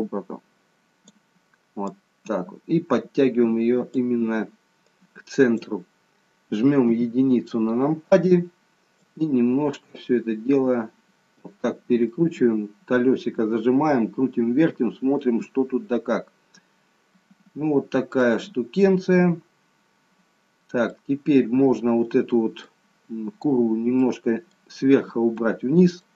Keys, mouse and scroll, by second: 1.9 click, 4.8 click, 6.8 KP_1, 9.0 click, 12.0 middle click, 16.0 scroll down 1, 16.3-17.1 scroll down 1, 17.1 middle click, 20.9 middle click, 23.5-23.9 scroll down 1, 24.0 middle click, 25.4 middle click.